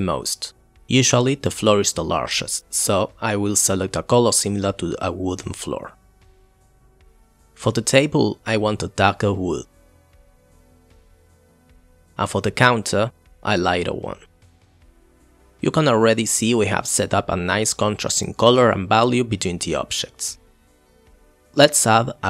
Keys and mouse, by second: 6.0 click, 6.2 shift+click, 6.5 o, 6.8 ctrl+z, 7.2 click, 7.7 click, 9.1 click, 10.8 drag, 11.1 click, 11.9 click, 13.2 click, 13.4 click, 13.8 click, 14.0 click, 15.2 click, 19.2 click.